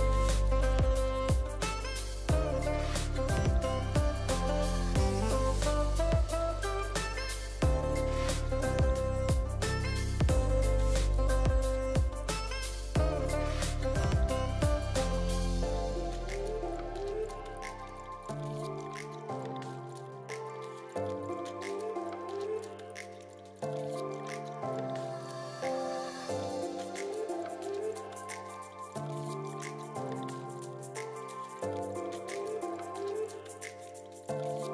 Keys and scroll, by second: 0.3 v, 1.9 Delete, 9.6 v, 16.8 r, 18.4 r, 19.8 ctrl+d, 19.9 ctrl+d, 20.0 ctrl+d, 20.4 ctrl+v, 27.0 v, 28.1 ctrl+z, 31.8 Delete.